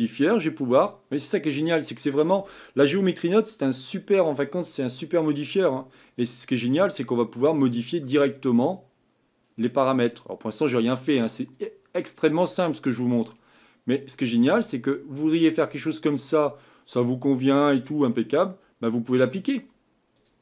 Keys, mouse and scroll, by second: 7.1-14.9 drag, 14.9 middle click, 15.6-16.3 scroll up 5, 16.3-20.2 middle drag, 20.2 click.